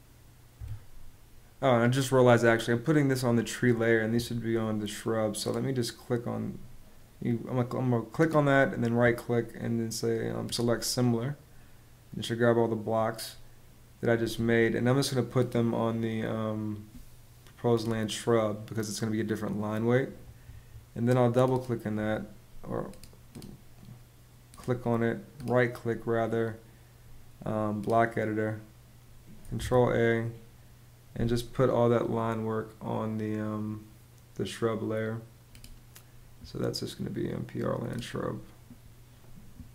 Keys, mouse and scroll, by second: 0.2 Escape, 29.2 super+a.